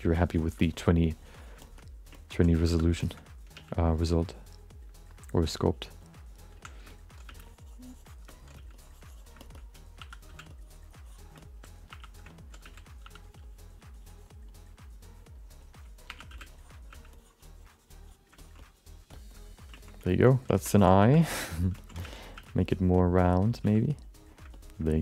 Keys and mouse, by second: 0.2 click, 0.6 shift+middle click, 0.7 middle click, 1.0 click, 1.6 shift+middle click, 1.7 alt+middle click, 2.1 ctrl+alt+middle click, 2.6 2, 3.0 alt+shift+middle click, 3.1 alt+middle click, 3.5 f, 3.8 click, 4.3 click, 5.2 click, 5.8 click, 6.5 1, 6.9 alt+middle click, 7.2 f, 7.4 click, 8.3 alt+middle click, 8.7 click, 8.7 f, 9.4 alt+shift+middle click, 10.0 2, 10.3 f, 10.5 click, 11.3 middle click, 11.9 1, 12.3 alt+middle click, 12.6 f, 13.0 2, 13.2 click, 13.9 click, 14.5 click, 15.0 click, 16.1 1, 16.3 f, 16.5 click, 16.9 f, 17.1 click, 17.6 click, 18.4 ctrl+alt+middle click, 18.6 alt+middle click, 19.1 alt+shift+middle click, 19.3 alt+middle click, 19.7 ctrl+alt+middle click, 20.0 shift+middle click, 20.3 alt+middle click, 20.5 ctrl+alt+middle click, 21.0 3, 21.3 alt+shift+middle click, 21.5 alt+middle click, 21.8 ctrl+middle click, 22.0 f, 22.3 f, 22.6 click, 22.9 click, 23.3 click, 23.7 f, 23.8 click, 24.2 click, 24.5 alt+middle click, 24.9 alt+shift+middle click.